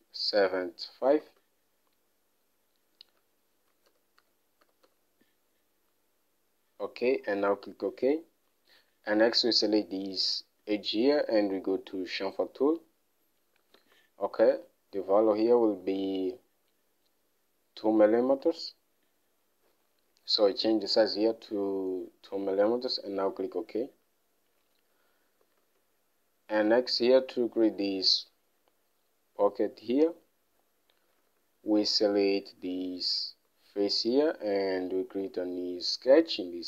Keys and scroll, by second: 1.8 alt+Tab, 3.8-5.8 typing, 14.2 alt+Tab, 19.0 alt+Tab, 21.5 2, 26.0 alt+Tab, 31.7 alt+Tab.